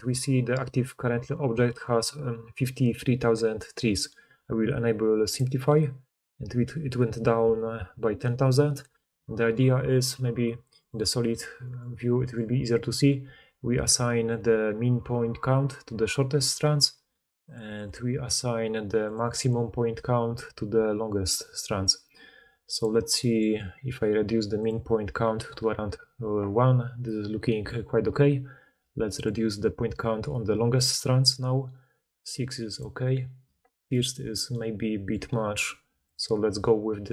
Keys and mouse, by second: 0.4-5.3 drag, 5.3-10.7 middle drag, 10.7-22.7 drag, 22.7-24.6 middle drag, 24.6-37.1 drag.